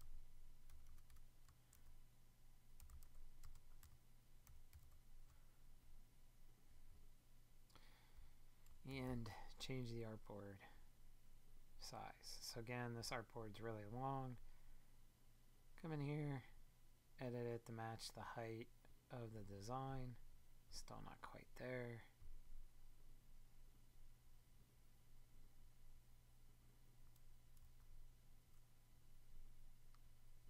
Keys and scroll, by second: 0.7 BackSpace, 1.4 shift+BackSpace, 10.3 super+d.